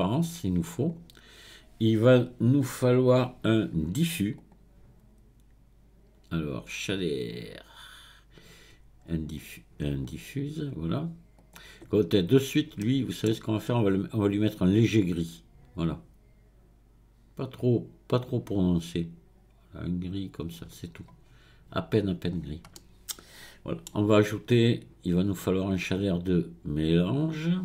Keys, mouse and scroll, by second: 4.4-7.5 drag, 12.3-12.8 scroll up 1, 12.8-14.1 middle drag, 14.1 click, 21.2-22.3 scroll down 1, 22.3-22.8 scroll down 1, 22.8-25.3 middle drag, 25.3-27.6 drag.